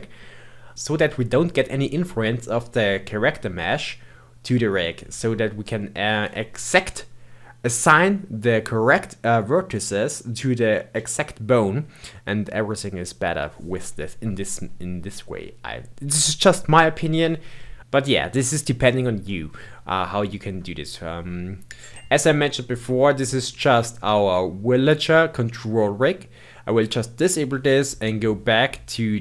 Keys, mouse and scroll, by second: 19.2-22.2 middle drag, 26.8 click.